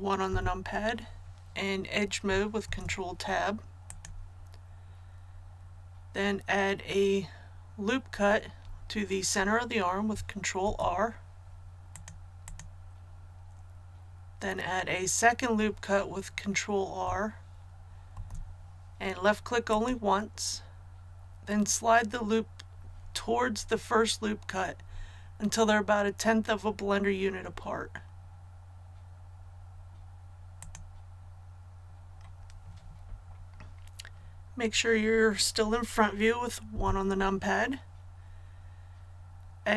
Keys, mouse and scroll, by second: 0.3 KP_1, 2.6 Tab, 3.8-4.9 drag, 10.6 ctrl+r, 11.9 click, 18.1 ctrl+r, 19.7 click, 27.6 click, 36.7 KP_1.